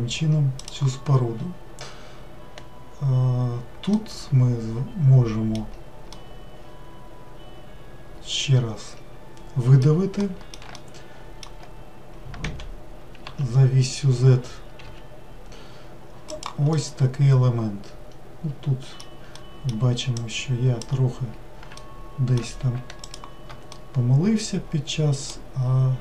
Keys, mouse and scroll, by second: 3.9-9.2 middle drag, 10.2-12.5 middle drag, 12.5 e, 16.8-20.2 middle drag, 20.2 drag, 21.8 alt+middle click, 23.0 shift+click, 23.7-26.0 middle drag.